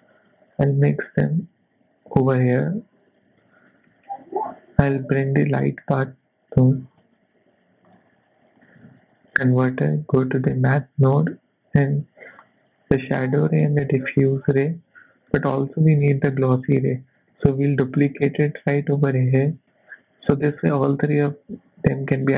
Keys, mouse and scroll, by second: 0.6 click, 2.3 click, 3.4 middle click, 3.9 shift+a, 8.8 shift+a, 12.4 click, 13.9 click, 14.9 middle click, 15.5 scroll up 2, 16.1 middle click, 16.6 click, 17.3 shift+d, 18.6 click, 20.4 click, 22.2 middle click.